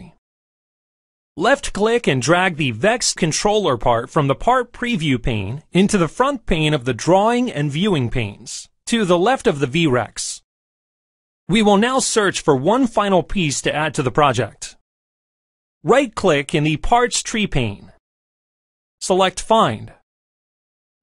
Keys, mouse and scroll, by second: 7.0 right click, 10.5 click, 15.6 right click.